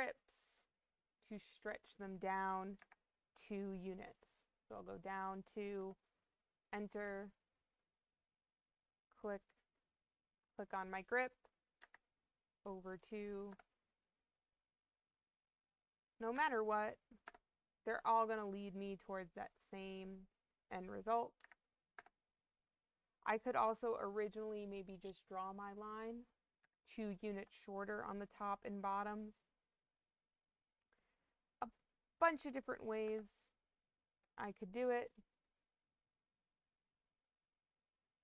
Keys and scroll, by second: 2.7 2, 5.7 Return, 11.7 2, 13.4 Return, 16.2 2, 17.2 Return, 21.3 2, 21.9 Return, 26.5 2, 27.2 Return, 32.1 2, 32.9 Return.